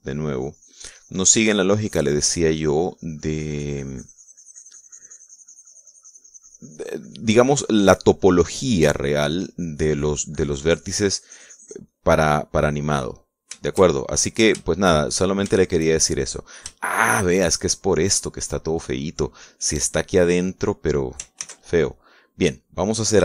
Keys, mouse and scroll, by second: 12.8-14.2 middle drag, 14.6 shift+middle click, 15.4-16.7 shift+middle drag, 16.8 shift+middle click, 17.6-18.8 shift+middle drag, 19.0-20.8 middle drag, 20.8-21.9 drag, 22.2 ctrl+s, 22.6 ctrl+click.